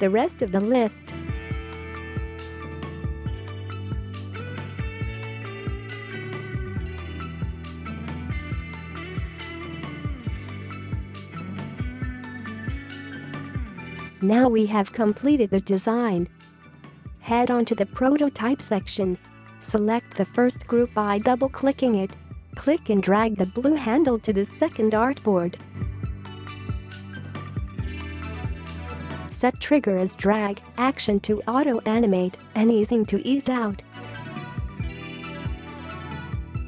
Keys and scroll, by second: 16.2 space.